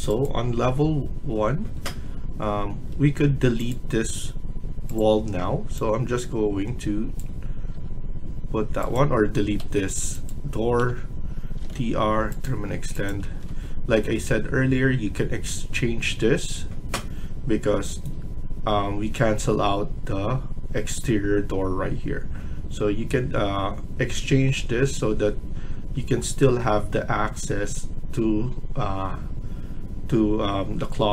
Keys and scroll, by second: 2.8 Escape, 4.0 Escape, 7.6 Escape, 9.5 Escape, 10.6-12.1 typing, 13.2 Escape, 13.4 Escape, 14.2 typing, 17.8 Escape.